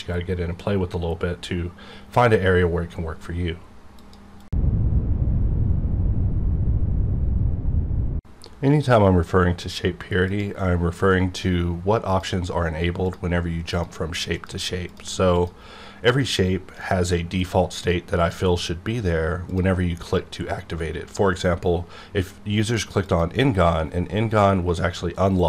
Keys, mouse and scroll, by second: 12.1 click, 19.5 click, 22.9 click.